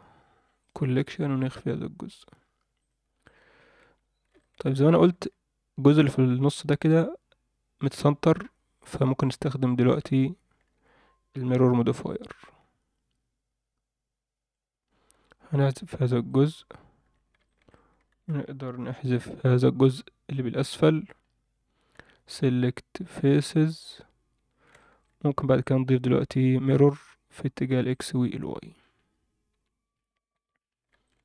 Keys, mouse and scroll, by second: 2.1 click, 2.8 click, 3.2 click, 3.8 Tab, 4.3 alt+shift+middle click, 4.7 scroll up 1, 5.1 alt+a, 5.3-6.8 scroll down 1, 8.7 click, 9.6 a, 10.3 scroll down 1, 10.7 alt+a, 11.8 b, 16.6-17.0 scroll up 1, 17.0 a, 17.4 shift+middle click, 18.1 alt+a, 18.9 b, 21.1-21.9 scroll up 2, 21.9 x, 24.3 Tab, 24.7 shift+middle drag, 25.6-27.1 drag, 27.9 click, 28.3-28.7 scroll down 2, 28.7-29.5 scroll up 2, 28.8 Tab, 29.5 Tab, 29.9-30.3 scroll up 2, 30.3 Tab, 30.6-30.9 scroll up 2, 31.0 alt+shift+middle click.